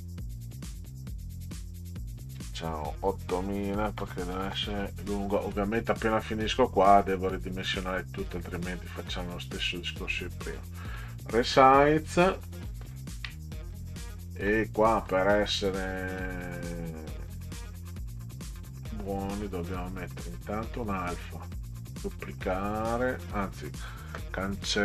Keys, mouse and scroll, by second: 1.3 click, 3.8-5.2 typing, 6.8 click, 7.3 click, 8.3 click, 10.6 click, 13.0 ctrl+scroll down 2, 15.0 click, 15.7 right click, 16.8 click, 18.5 right click, 19.4 click, 21.8 right click, 23.4 click.